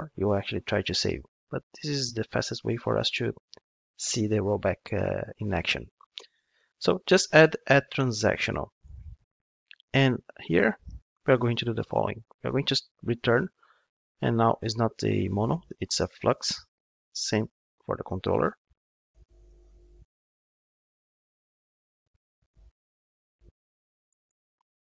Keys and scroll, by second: 6.0 Tab, 8.7 Return, 17.3 ctrl+Tab, 21.5 ctrl+Tab, 24.1 Return.